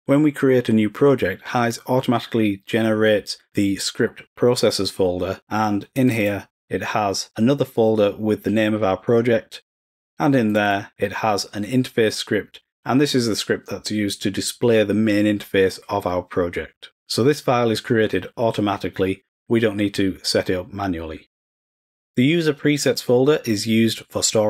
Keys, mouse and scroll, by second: 6.1 click, 6.2 click, 10.5 click, 10.7 click, 20.4 scroll up 1, 22.6 click.